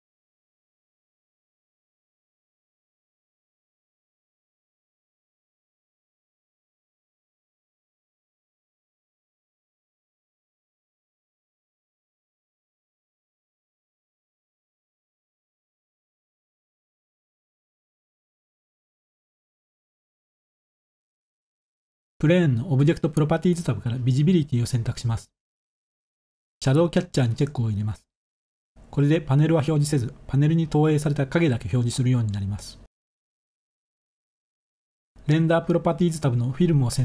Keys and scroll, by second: 0.6 1, 2.4 typing, 6.0 typing, 8.2 0, 14.1 ctrl+s.